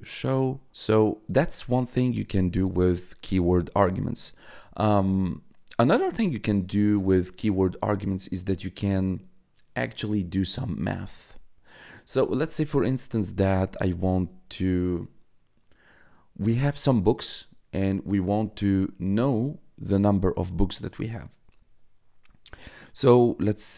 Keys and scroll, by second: 13.2-14.3 typing.